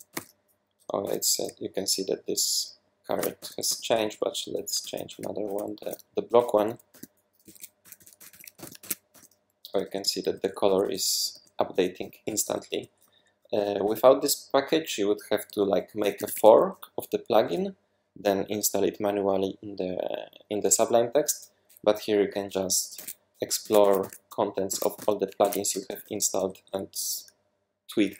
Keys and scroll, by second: 0.0-1.0 typing, 2.9-4.8 typing, 4.8 super+z, 5.1 super+z, 5.4 super+z, 6.0-13.4 typing, 15.5-16.3 typing, 22.9-27.5 typing.